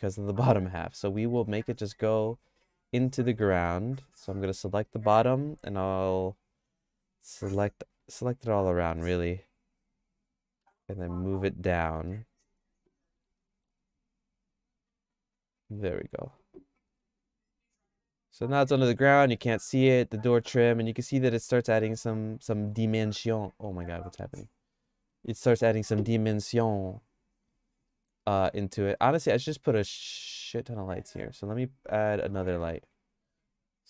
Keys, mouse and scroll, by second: 1.2 middle click, 1.6 Tab, 3.4 middle click, 3.8 shift+middle click, 8.2 alt+click, 8.9 middle click, 9.1-10.6 shift+middle drag, 11.8 middle click, 12.2 shift+middle click, 13.2 g, 16.3 Tab, 16.9 Tab, 17.7 Tab, 18.0 click, 18.8 middle click, 19.0-22.5 middle drag, 23.0-25.5 shift+middle drag, 27.1 click, 27.9 middle click, 28.3-29.3 shift+middle drag, 31.0 click, 32.3 shift+d.